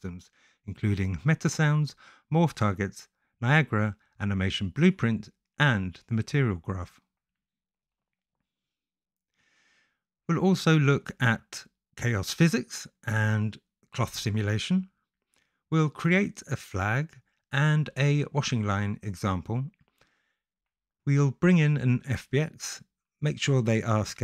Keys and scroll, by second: 0.9 BackSpace.